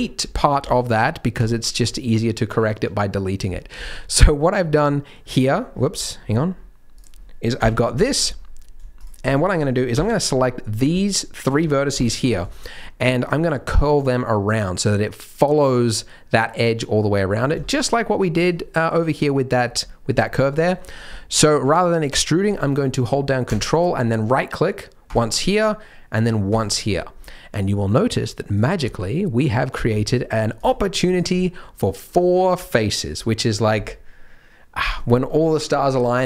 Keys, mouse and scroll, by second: 0.5 x, 3.9 scroll down 1, 4.2-4.8 scroll up 1, 4.8 middle click, 4.8 scroll up 1, 5.1-5.7 scroll down 2, 5.7-6.2 scroll down 9, 6.2-6.9 scroll up 3, 6.9 click, 7.5 KP_Decimal, 8.0-8.8 scroll down 1, 8.8 scroll down 1, 9.0 shift+click, 9.2 click, 9.9 KP_3, 10.7 scroll down 2, 10.9 middle click, 11.9 KP_3, 12.5 shift+middle click, 17.1-17.5 scroll down 8, 17.6 shift+middle click, 19.3 shift+middle click, 19.9 shift+middle click, 20.4 shift+middle click, 20.8-23.4 scroll up 7, 25.0 ctrl+right click, 26.5 ctrl+right click, 27.1-28.5 scroll up 1, 28.5 click, 28.5-28.8 scroll up 1, 28.8 middle click, 30.0 shift+click, 30.5 click, 31.3 shift+click, 31.4 middle click, 32.6 middle click.